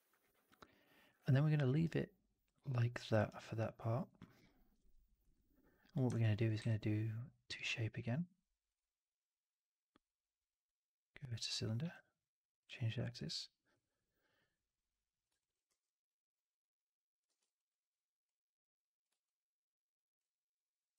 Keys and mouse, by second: 1.2 4, 1.6 alt+right drag, 1.8-3.0 alt+drag, 3.2 alt+right drag, 3.3-4.0 alt+drag, 4.1 alt+middle drag, 4.3-4.7 alt+right drag, 5.1-5.9 drag, 6.2 alt+middle drag, 6.5 q, 12.9 alt+drag, 15.3 alt+drag, 17.1 w, 19.1-20.0 alt+drag.